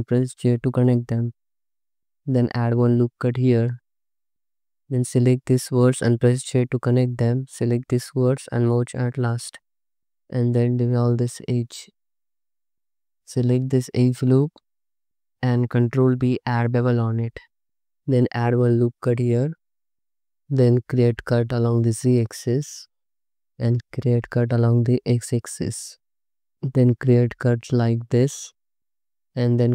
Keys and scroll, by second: 0.4 j, 2.4 ctrl+r, 6.5 j, 8.8 m, 9.7 2, 11.7 ctrl+x, 12.7 2, 16.0 ctrl+b, 18.2 ctrl+r, 20.0 1, 21.0 z, 21.9 space, 24.0 x, 25.3 space, 28.7 space, 29.4 space.